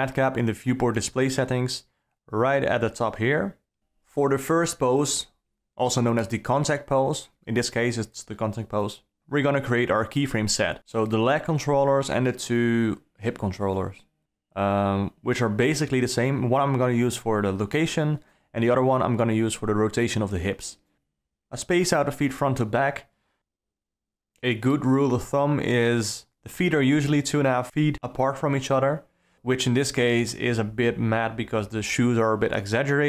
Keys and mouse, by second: 4.4 i, 6.1-7.5 drag, 8.4-9.8 right drag, 12.4 click, 14.0 i, 17.0 alt+a, 19.3 click, 23.4 g, 25.9 g, 29.5 click, 30.8 g.